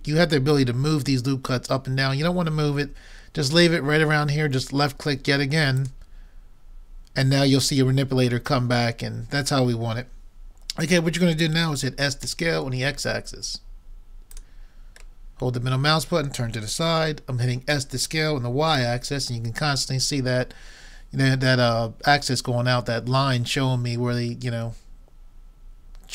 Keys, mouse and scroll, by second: 6.4-6.9 scroll up 1, 7.4-8.3 scroll up 1, 8.8-9.8 scroll up 1, 9.8-10.7 scroll up 1, 11.2-12.2 scroll up 1, 12.3 s, 15.2-17.7 middle drag, 17.7 s.